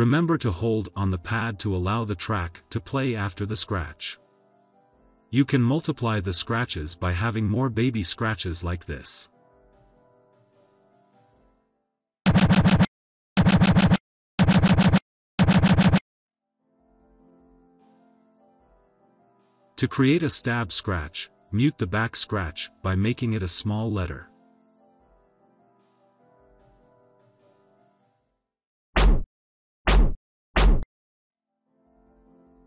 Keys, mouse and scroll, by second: 2.0 click, 5.2-6.9 typing, 8.9 click, 9.3 click, 12.2 click, 13.3 click, 14.3 click, 15.3 click, 17.3-17.7 drag, 21.2 e, 21.8 shift+a, 25.3 click.